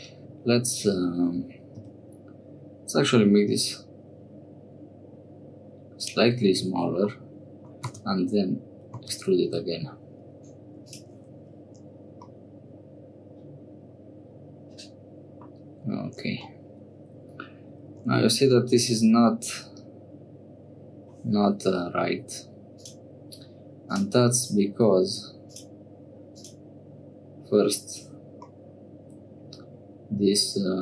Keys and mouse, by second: 1.8 s, 7.1 middle click, 8.1 e, 11.3 Tab, 12.3-15.5 middle drag, 16.4 Tab, 17.9 Tab, 22.7 click, 23.8 click, 25.4 click, 26.3 click, 28.5-30.8 middle drag.